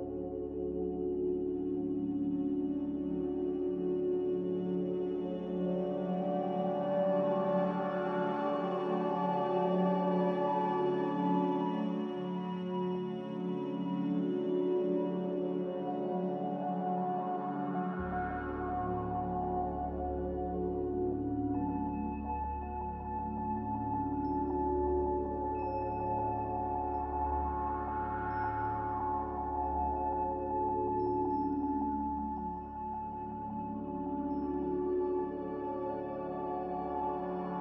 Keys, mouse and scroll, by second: 13.5 ctrl+b, 22.3 a.